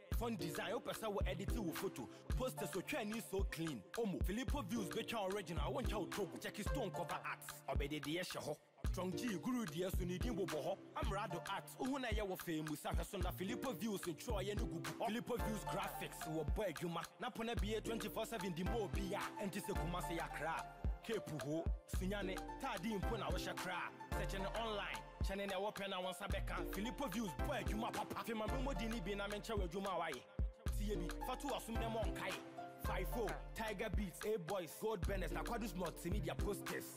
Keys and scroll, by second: 33.5 ctrl+j.